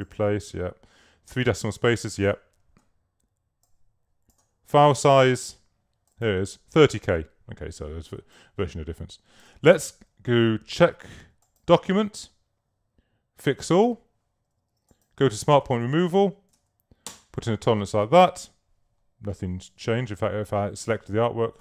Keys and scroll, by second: 16.3-17.2 typing, 19.8 super+a, 20.7 alt+super+a.